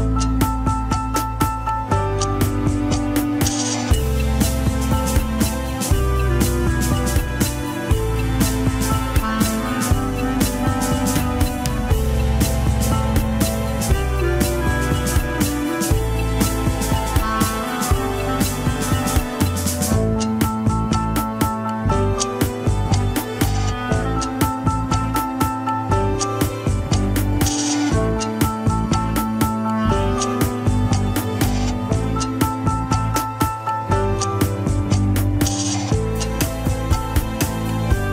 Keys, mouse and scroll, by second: 3.4-6.0 middle drag, 6.0 click, 6.5 KP_1, 6.9-7.6 scroll up 2, 7.6 click, 8.4 g, 10.4-12.3 middle drag, 12.3-12.9 scroll down 3, 12.5 KP_1, 13.6 ctrl+s, 14.9 KP_3, 15.8 scroll up 4, 16.4 g, 17.6 KP_1, 18.7 g, 22.8-24.4 middle drag, 24.4 KP_1, 24.7-25.5 scroll down 1, 26.5 a, 26.9 alt+r, 27.2 alt+g, 27.3 scroll down 2, 28.0 ctrl+s, 28.6-29.4 scroll up 10, 29.4 alt+z, 30.1 click, 30.6 alt+z, 31.3 r, 35.6 alt+z, 36.0 click, 36.7 alt+z, 37.2 r.